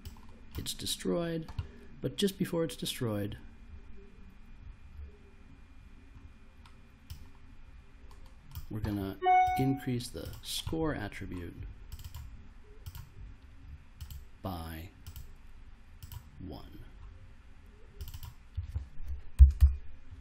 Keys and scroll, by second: 19.1-20.0 typing.